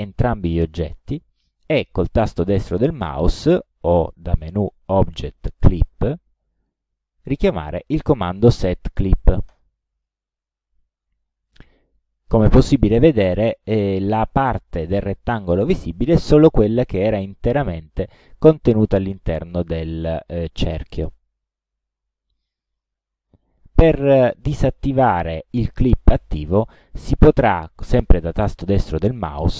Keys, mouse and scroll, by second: 4.3 click, 6.6 click, 7.4 right click, 9.5 click.